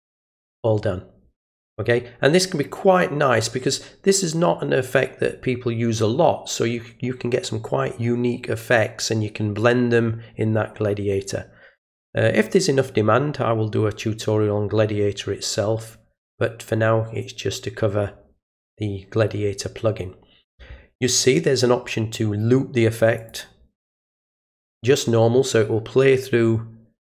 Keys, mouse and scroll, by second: 23.2 click, 24.4 click.